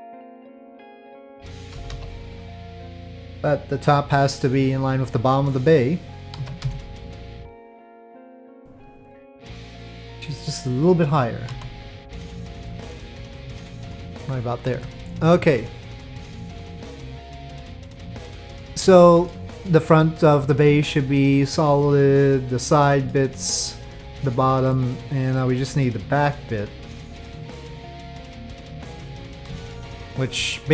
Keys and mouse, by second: 0.6 click, 1.7 KP_5, 1.9 KP_3, 6.4 z, 11.5 e, 12.8 click, 12.8-14.4 middle drag, 12.8 z, 14.7 Tab, 16.5 click, 18.7-19.3 middle drag, 20.8-21.7 middle drag, 22.1 click, 22.8 middle drag, 23.7 click, 24.7 middle drag, 25.3 click, 27.3-29.0 middle drag, 29.7 shift+middle drag.